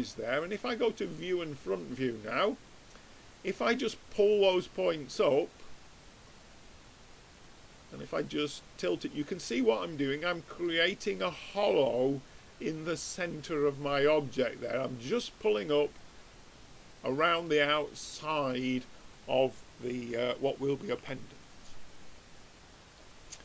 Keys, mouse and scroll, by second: 0.8-2.6 drag, 4.2-5.8 drag, 7.9-9.6 middle drag, 11.3-13.3 middle drag, 18.4-21.0 middle drag, 21.0 Tab, 21.7-23.4 middle drag.